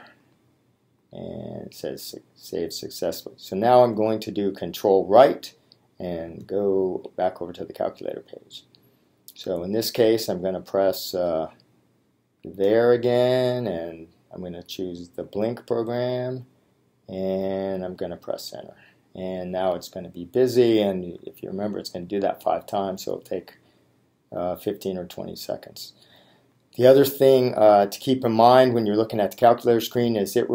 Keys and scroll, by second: 0.3 Return, 7.1 ctrl+Right, 15.3 Return.